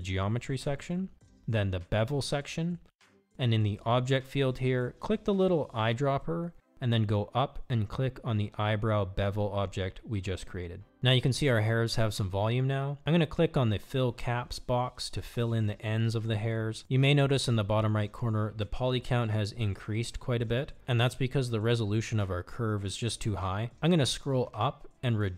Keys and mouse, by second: 12.7 click, 23.2 click, 23.8 click.